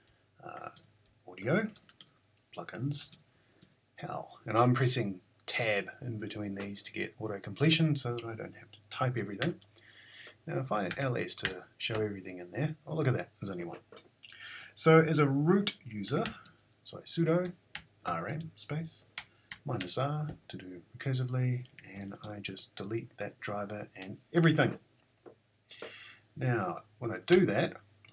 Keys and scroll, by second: 0.0-3.0 typing, 0.7 Tab, 3.1 Tab, 9.4 Return, 10.6-11.5 typing, 15.7-17.7 typing, 19.2 -, 19.5 r, 21.5-22.4 typing, 27.3 Return.